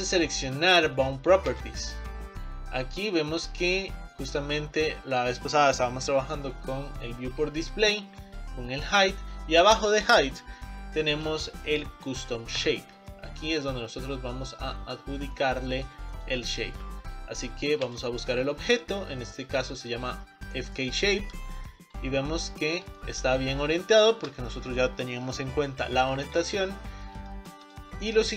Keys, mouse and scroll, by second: 14.5 scroll down 4, 15.4-17.8 middle drag, 21.8-22.2 scroll up 3, 22.2-26.6 middle drag, 26.6 scroll down 3, 26.9 scroll up 4, 27.4-28.3 shift+middle drag.